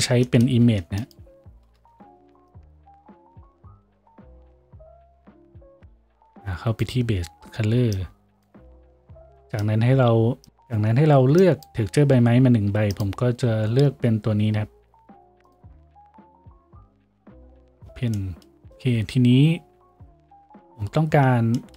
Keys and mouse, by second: 0.6 shift+a.